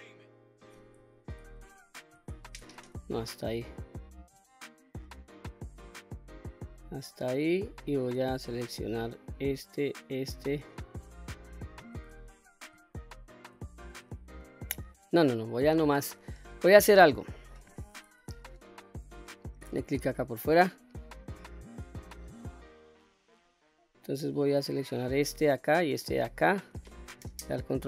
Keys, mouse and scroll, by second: 1.3 ctrl+KP_Add, 2.6 ctrl+z, 3.1-3.6 scroll up 1, 3.6-6.3 middle drag, 7.5-7.9 shift+middle drag, 9.2 shift+click, 9.8 shift+click, 10.7-11.4 middle drag, 11.7-12.0 scroll up 1, 12.3-12.6 shift+middle drag, 12.9-13.5 scroll up 1, 14.3-14.7 scroll down 2, 15.1 middle click, 17.2 middle click, 19.0 click, 19.5-19.9 scroll up 2, 19.9-20.6 middle drag, 21.0-21.8 scroll up 1, 21.9-22.2 shift+middle drag, 22.6-24.2 middle drag, 25.0 click, 26.0 shift+click, 27.6 ctrl+KP_Add.